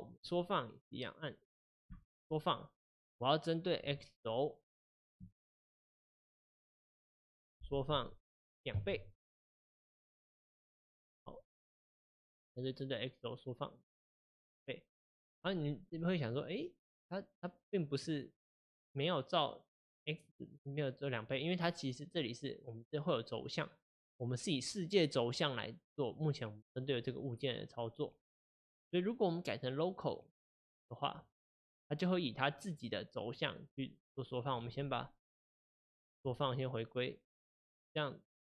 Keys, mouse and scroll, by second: 2.0 s, 11.9-30.1 middle drag, 30.1-31.5 drag, 34.9 click, 36.0 alt+s.